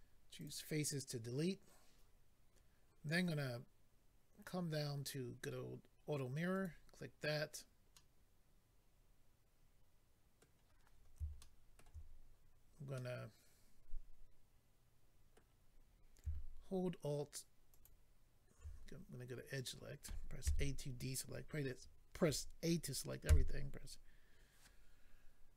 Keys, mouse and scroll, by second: 0.3 click, 0.4 click, 4.0-5.0 scroll down 3, 5.0 scroll down 1, 6.6 click, 7.9 middle click, 10.9-11.4 scroll up 2, 11.4 shift+middle click, 12.0 scroll up 2, 13.0 middle click, 17.7 alt+click, 17.8 alt+click, 19.5 click, 19.6 click, 20.4 a.